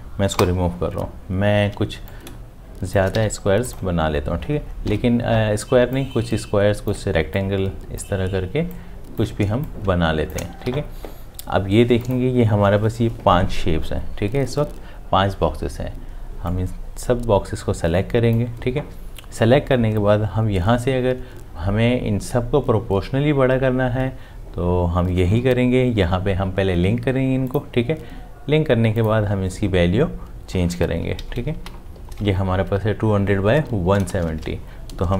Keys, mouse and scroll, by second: 0.3 Delete, 2.3 m, 3.3 v, 9.9 shift+click, 10.9 v, 31.2 Right, 34.1 shift+Home.